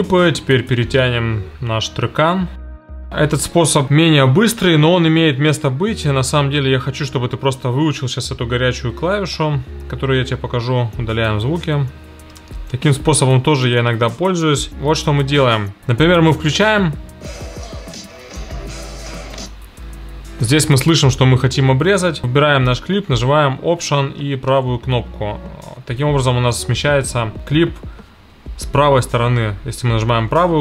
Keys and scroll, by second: 9.4 shift+super+g, 12.3 BackSpace, 26.6 alt+].